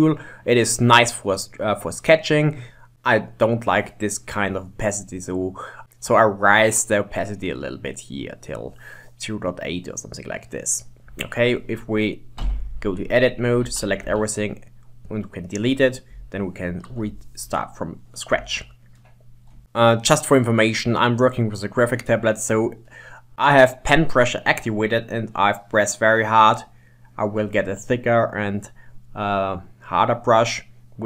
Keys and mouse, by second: 5.2-6.5 drag, 12.5 Tab, 12.9-13.4 middle drag, 13.7 a, 14.1 x, 16.2 ctrl+Tab, 18.6-19.6 shift+middle drag, 24.4-27.4 drag.